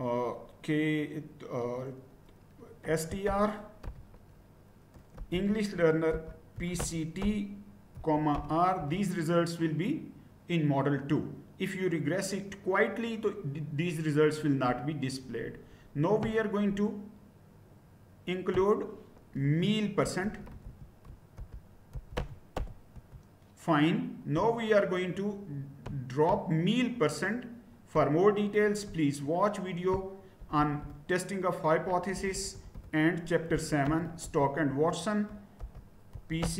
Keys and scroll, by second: 2.7-3.8 typing, 4.9-8.3 typing, 8.7 Return, 19.4-23.0 typing, 30.4 BackSpace, 30.6 BackSpace, 30.8 BackSpace, 32.1-36.5 typing.